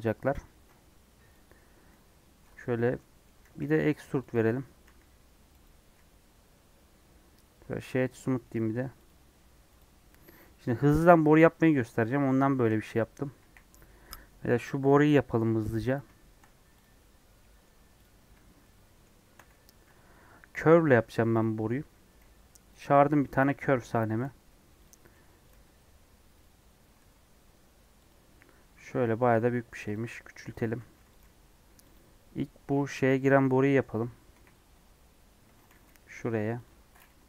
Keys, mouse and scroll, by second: 2.9 middle click, 3.4 e, 6.8 Tab, 9.0 right click, 9.4 scroll down 2, 9.7 click, 10.0-12.5 middle drag, 12.5 KP_1, 13.1 KP_3, 13.3 KP_1, 13.6 scroll up 1, 14.8-15.7 scroll up 1, 16.7 click, 18.6-21.3 shift+middle drag, 21.3 shift+a, 21.5-22.1 scroll down 5, 22.1 g, 22.9-23.9 scroll up 7, 23.2 shift+middle click, 24.1 g, 25.0 r, 25.5 g, 26.5 scroll down 5, 26.9 g, 28.5 Tab, 29.0 Tab, 29.3 s, 30.0 scroll up 1, 30.7 s, 31.1 g, 32.7 scroll up 1, 33.1-34.5 middle drag, 34.5 KP_1, 34.7 KP_3, 35.1-35.4 scroll up 3, 35.6 g, 37.1 KP_1.